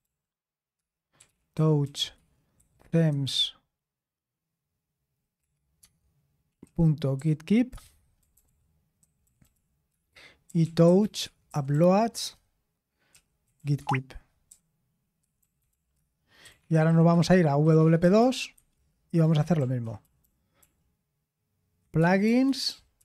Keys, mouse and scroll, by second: 0.0-3.7 typing, 5.1-23.0 typing.